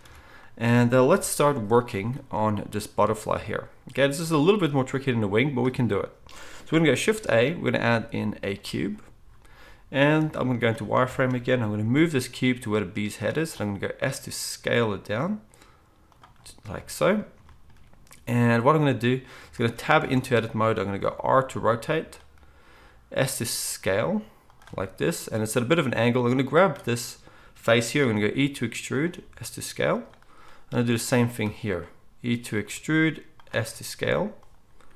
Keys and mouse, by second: 0.0 alt+a, 0.0-26.2 alt+middle drag, 1.1 KP_1, 7.1 shift+a, 10.2 z, 11.8 g, 14.0 s, 20.0 Tab, 21.0 r, 24.0 s, 26.2-29.2 drag, 28.0 e, 29.2-31.0 middle drag, 29.2 s, 31.0-33.6 drag, 32.6 e, 33.6-34.9 middle drag, 33.6 s, 34.8 g.